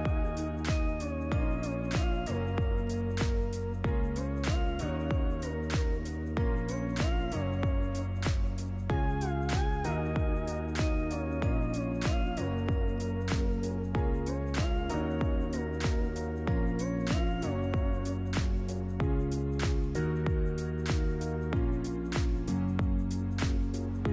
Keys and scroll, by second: 17.5 i, 18.7 i, 22.1 v, 24.0 i.